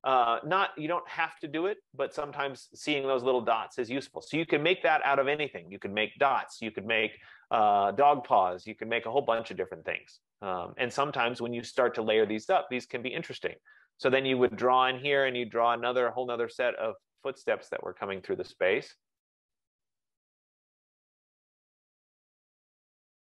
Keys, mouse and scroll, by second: 0.1 click, 14.3 click, 15.9 click, 16.7 click, 18.5 click, 19.9 click, 20.6 click, 21.5 click, 22.4 click.